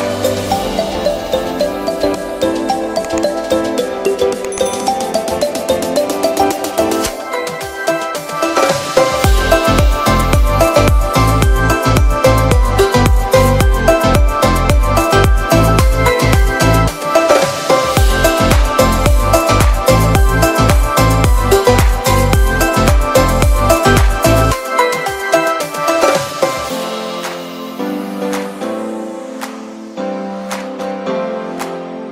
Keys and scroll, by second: 4.9 b, 6.0 x, 10.5 v, 10.9 z, 12.7 v, 14.9 shift+super+g, 15.2 Delete, 20.7 super+], 26.6 super+-, 27.5 super+t, 28.0 alt+shift+super+t.